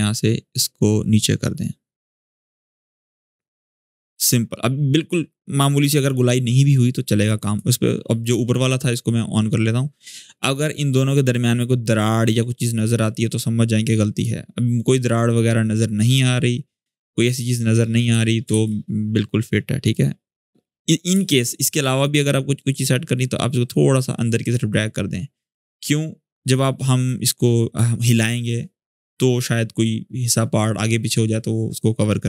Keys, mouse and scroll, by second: 10.6-12.0 scroll down 1, 13.9-17.9 drag, 18.3 ctrl+z, 19.6 click, 20.1-20.9 scroll up 1, 20.9 space, 21.0 click, 21.4 space, 22.3-24.5 drag, 25.1-26.4 drag, 26.8-27.7 click.